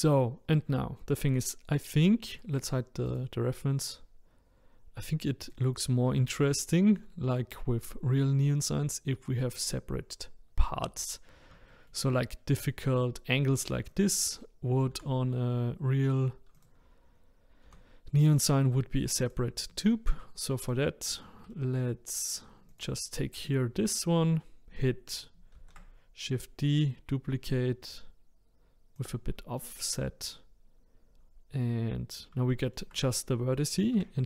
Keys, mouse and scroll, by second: 0.3-1.7 scroll down 2, 3.1 click, 5.4 click, 6.2-7.2 shift+middle drag, 7.2-10.2 scroll down 1, 11.7 shift+middle click, 12.3-13.9 scroll up 4, 13.9 click, 14.9 r, 17.7 g, 19.8 shift+middle click, 20.6 click, 21.0-21.5 scroll down 2, 21.5-22.7 shift+middle drag, 22.7 click, 25.5 shift+d, 32.1-32.5 scroll up 2, 32.5-33.9 shift+middle drag, 33.9 e.